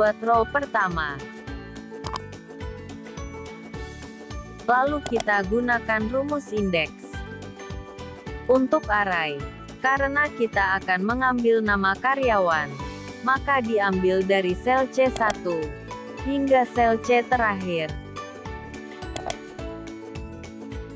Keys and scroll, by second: 15.2 ctrl+shift+Down.